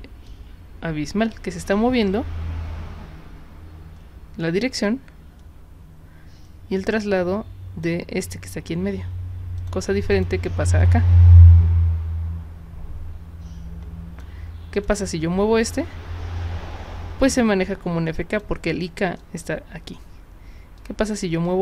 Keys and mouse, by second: 0.2-7.8 drag, 9.6 click, 10.1 click, 10.8-14.2 drag, 14.7 click, 15.7-18.4 drag, 19.2 drag, 20.8 click, 21.5-21.6 drag.